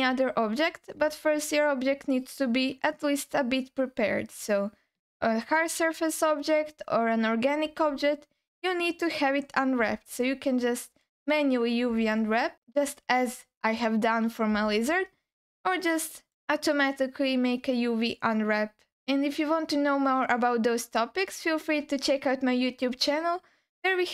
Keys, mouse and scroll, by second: 0.3-0.9 scroll down 1, 1.1-3.0 alt+middle drag, 4.3 click, 7.7 Tab, 10.1 alt+middle click, 12.1 alt+middle click, 14.8-16.3 alt+middle drag.